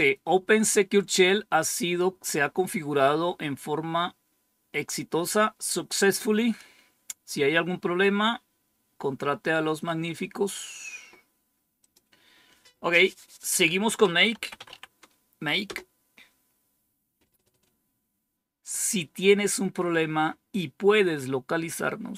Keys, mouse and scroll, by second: 10.0-10.9 scroll down 1, 11.7 click, 14.0-15.1 typing, 15.6 Return.